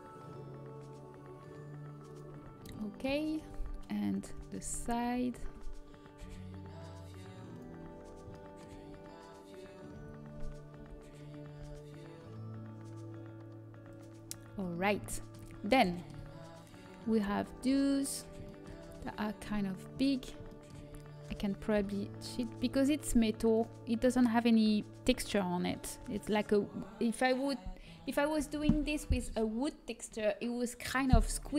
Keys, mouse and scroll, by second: 3.3 a, 4.7 l, 6.1 g, 9.9 a, 12.5 l, 12.5 g, 14.4 a, 18.5 l, 19.4 g, 23.3 s, 23.3 g, 27.9 s.